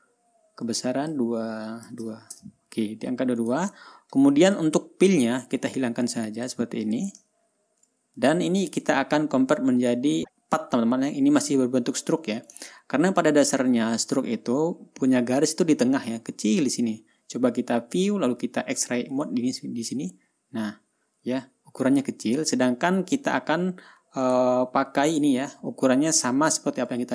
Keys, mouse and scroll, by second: 0.1 ctrl+scroll up 2, 1.1 click, 2.3 KP_2, 2.8 Return, 3.9 click, 4.2 ctrl+scroll down 2, 5.0 ctrl+click, 6.9 click, 7.3 click, 7.8-8.1 ctrl+scroll up 2, 8.6 ctrl+click, 9.5 ctrl+scroll down 1, 10.0 ctrl+scroll up 1, 13.4-13.7 ctrl+scroll up 2, 14.2 ctrl+scroll down 2, 18.4 click, 19.6 click, 24.7 click, 25.6 click, 26.9 ctrl+scroll down 2.